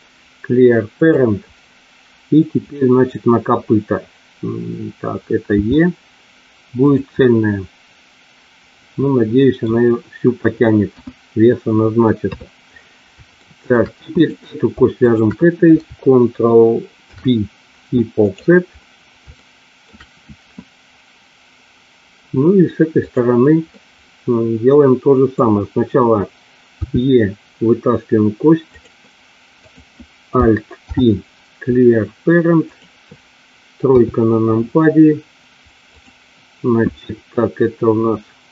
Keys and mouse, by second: 5.6 e, 6.7 click, 7.2-9.5 middle drag, 10.8 KP_1, 12.2 KP_3, 13.3 shift+middle click, 14.1 click, 15.0 shift+click, 17.0 ctrl+p, 19.2 shift+middle click, 23.1 click, 23.6-25.2 middle drag, 26.7 e, 29.6 click, 30.7 alt+p, 33.9 KP_3, 35.9 click.